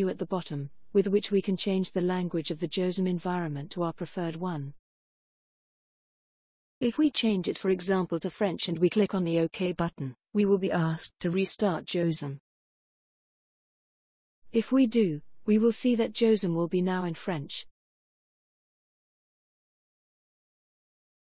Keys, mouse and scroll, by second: 0.7 ctrl+click, 8.0 click, 9.4 click, 14.3 click.